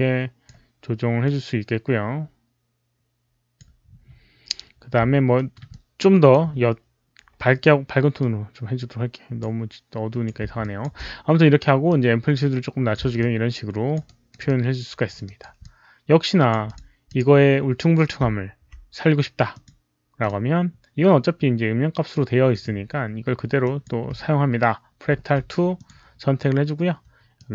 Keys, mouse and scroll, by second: 1.1-3.5 drag, 5.2 alt+middle click, 5.6 alt+click, 8.1-9.3 alt+drag, 9.3 alt+middle click, 10.0 alt+click, 10.5 alt+click, 11.8 alt+click, 11.9 alt+middle click, 12.8 alt+middle click, 13.1 alt+click, 13.9 alt+right click, 14.3 alt+click, 15.2 alt+right click, 15.5 alt+click, 16.5 alt+click, 16.6 alt+right click, 16.9 alt+click, 18.6 alt+click, 19.4 alt+right click, 19.4 alt+click, 20.1 click, 22.4 alt+click, 23.5 click, 25.7 click, 27.3 ctrl+c, 27.3 click.